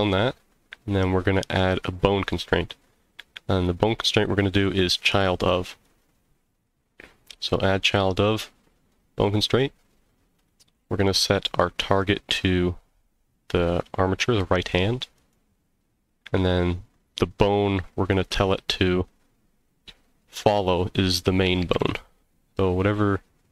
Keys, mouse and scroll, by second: 1.8-6.0 drag, 10.5 click, 18.1-23.5 drag.